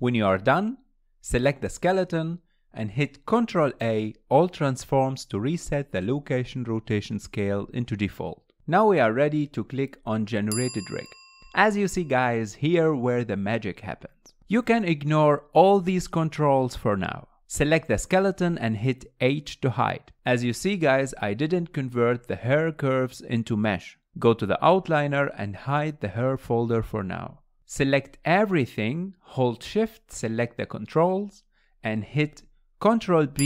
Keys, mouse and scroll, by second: 0.4-1.7 middle drag, 1.7 ctrl+a, 5.4 middle click, 5.4-5.9 scroll up 2, 5.9-6.6 shift+middle drag, 6.6 scroll down 1, 6.9 shift+middle click, 7.3 scroll down 1, 7.6-9.3 middle drag, 9.3 click, 10.3-12.3 scroll down 4, 12.3-13.3 drag, 13.3-16.3 middle drag, 17.6-18.1 shift+middle drag, 18.1 click, 19.6 h, 20.1 scroll down 2, 20.4 Tab, 20.8 click, 21.7 g, 23.3 Tab, 25.5 click, 25.9-26.4 scroll down 1, 26.4 shift+middle click, 26.9-27.2 scroll down 1, 27.2-28.1 middle drag, 28.1 click, 31.1 shift+click, 32.9 ctrl+p.